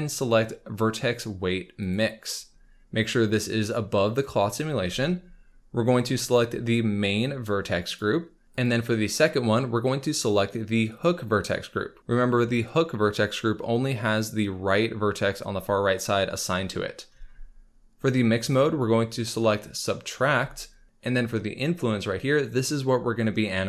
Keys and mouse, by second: 3.3-4.2 drag, 6.3-8.0 drag, 8.6-11.0 drag, 18.5-20.2 drag.